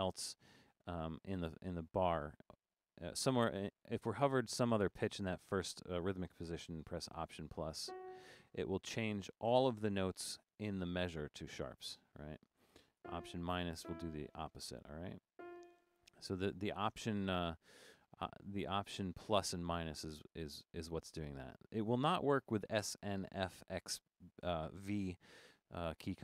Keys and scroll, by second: 0.2 Up, 0.5 Down, 7.9 alt++, 10.6 Right, 10.8 Right, 11.0 Right, 11.1 Right, 11.5 Left, 11.7 Left, 11.7 Left, 11.9 Left, 13.0 alt+-, 13.8 alt+-, 16.2 Down, 16.3 Down, 16.5 Down.